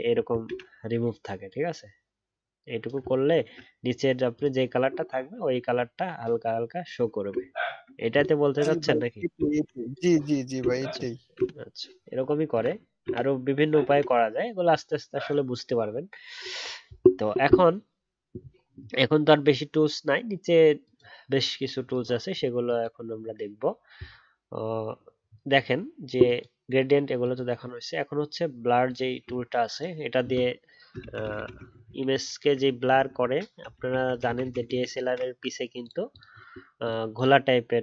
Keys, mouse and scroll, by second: 0.4 ctrl+z, 3.0 alt+scroll down 1, 3.3-4.9 alt+scroll up 1, 4.9 alt+scroll down 1, 5.1-7.3 alt+scroll up 1, 7.3 alt+scroll down 1, 7.5-10.5 alt+scroll up 1, 10.6 alt+scroll down 1, 10.7-11.3 alt+scroll up 1, 11.3 ctrl+d, 31.2 ctrl+z, 31.3 ctrl+z, 31.5 ctrl+z, 31.6 ctrl+z, 31.8 ctrl+z, 31.9 ctrl+z, 32.2 ctrl+z, 32.4 ctrl+z, 32.5 ctrl+z, 32.6 ctrl+z, 32.8 ctrl+z, 32.9 ctrl+z, 33.2 ctrl+z, 33.3 ctrl+z, 33.8 ctrl+z, 33.9 ctrl+z, 34.1 ctrl+z, 34.2 ctrl+z, 34.4 ctrl+z, 34.6 ctrl+z, 34.8 ctrl+z, 35.0 ctrl+z.